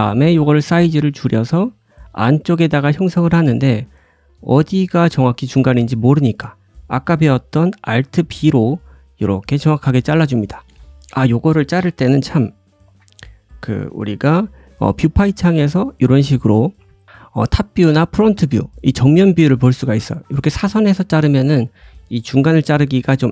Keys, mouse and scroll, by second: 2.1-2.5 scroll up 2, 2.6 shift+middle click, 3.8-23.3 right drag, 3.8 s, 5.2 shift+middle click, 7.8 alt+b, 12.2 alt+v, 12.9 alt+b, 15.1 `, 20.0 scroll down 1, 20.1 middle click, 20.7-21.8 scroll down 1, 22.3 alt+b.